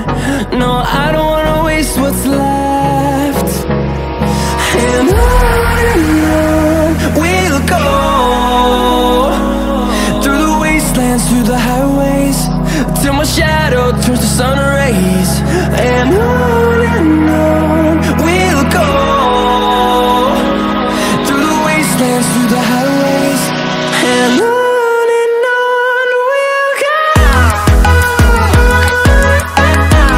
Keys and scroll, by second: 13.8 ctrl+t.